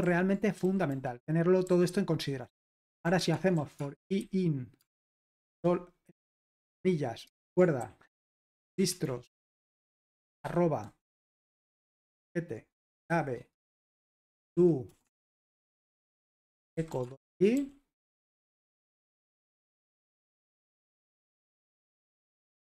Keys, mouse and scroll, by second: 0.0 super+l, 0.6 typing, 2.7-11.9 typing, 13.7 Return, 13.7-20.6 typing, 18.6 Return, 20.8 super+h, 21.4 ctrl+p, 22.1 Return.